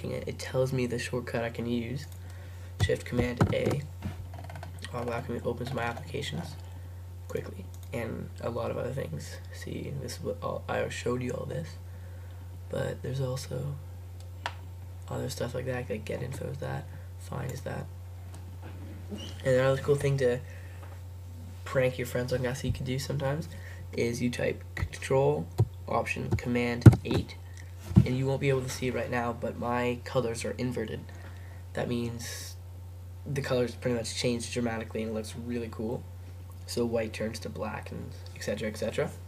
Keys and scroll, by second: 3.5 shift+super+a, 26.9 ctrl+alt+super+8.